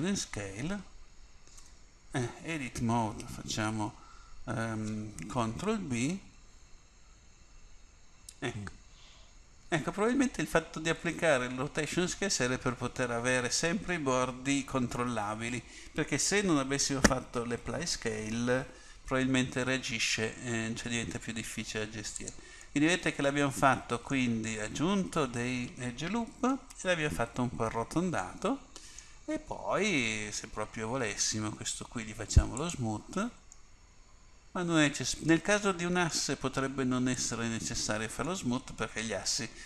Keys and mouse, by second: 1.7 Tab, 5.7 ctrl+b, 22.8 middle click, 30.7 Tab, 32.7 click, 33.7 click, 34.6-37.2 middle drag, 37.2-39.0 drag, 38.4-39.6 middle drag.